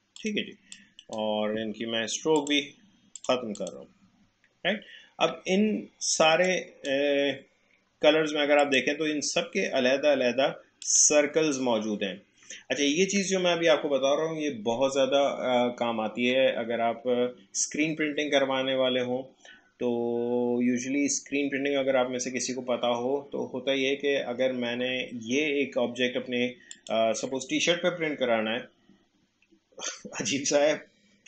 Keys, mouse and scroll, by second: 4.4 alt+scroll up 1, 4.9-5.3 alt+scroll down 1, 5.6 space, 6.5-8.6 drag, 26.7 click.